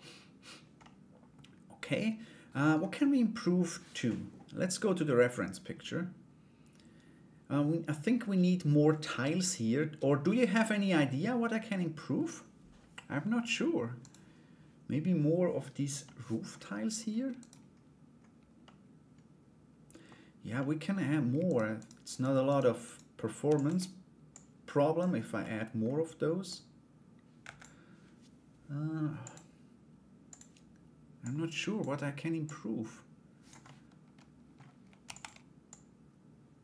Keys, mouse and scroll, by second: 0.4 middle click, 1.5 middle click, 13.6 right click, 15.6 middle click, 17.0 right click, 18.2-19.6 middle drag, 20.1 middle click, 21.0 shift+right click, 21.3 shift+right click, 21.7 shift+right click, 22.1 shift+right click, 22.4 shift+right click, 23.0 shift+d, 24.0 click, 25.0-26.0 middle drag, 26.0-27.2 drag, 28.8-30.1 drag, 30.8 click, 32.0-33.2 drag, 33.2 middle click, 34.6 shift+d, 35.3-36.5 drag.